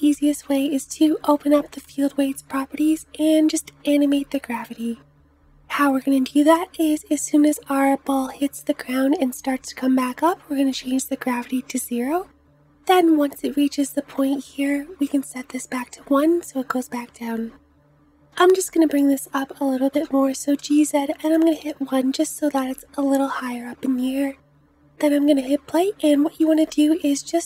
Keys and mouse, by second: 18.3 g, 25.2 space, 26.7 space.